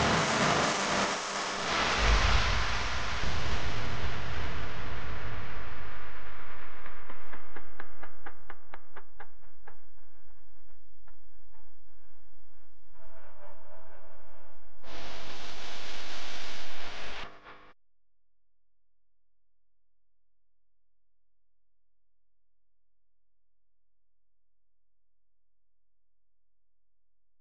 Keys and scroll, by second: 5.3 space, 5.8 super+space, 5.9 super+space, 10.1 u, 15.3-16.5 typing, 18.7 typing, 19.8-22.2 typing, 20.9 alt+super+space, 23.8 v.